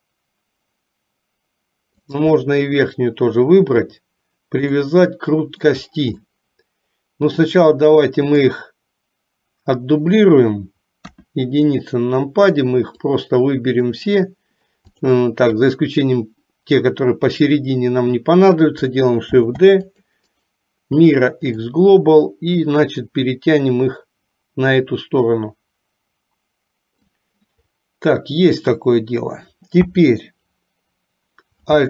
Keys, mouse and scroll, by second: 2.1 shift+click, 4.9 middle click, 6.4-8.6 middle drag, 11.0 KP_1, 13.3 click, 15.8-16.9 drag, 19.5 shift+d, 20.4-21.8 right drag, 22.8-27.1 drag, 29.9 KP_3.